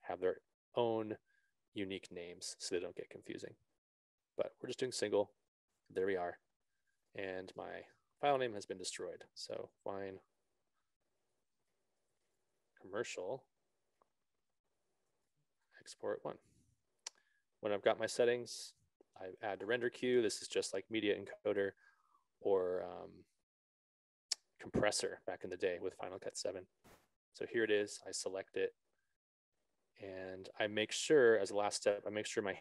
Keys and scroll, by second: 9.7 1, 9.9 shift+i, 10.1 shift+e, 11.7-14.3 typing, 15.6 shift+e, 16.0 shift+o, 16.1 shift+t, 16.7 1.